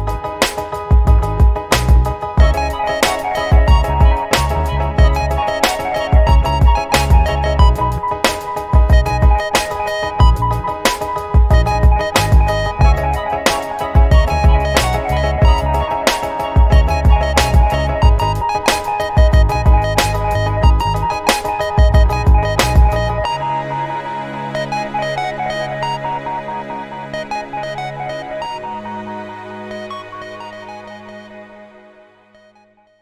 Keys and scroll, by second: 8.1 ctrl+BackSpace, 18.0 ctrl+t, 21.5 Delete, 23.8 ctrl+t, 30.1 ctrl+t.